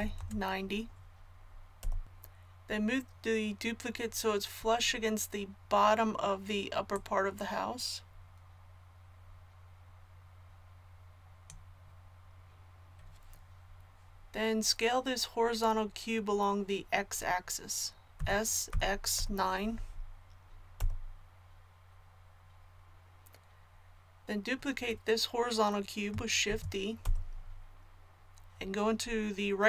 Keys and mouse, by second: 6.9-18.1 drag, 18.1 s, 26.5 shift+d.